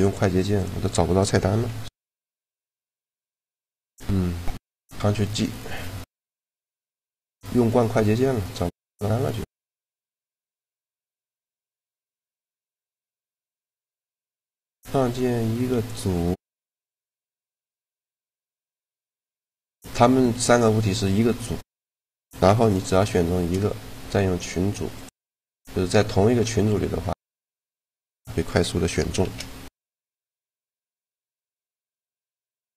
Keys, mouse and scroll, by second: 1.3 t, 3.0 click, 4.6 click, 16.4 right click, 16.9 shift+g, 20.0 g, 22.3-24.1 right drag, 22.9 shift+g, 29.0 shift+a, 31.4 g, 32.4-32.7 drag.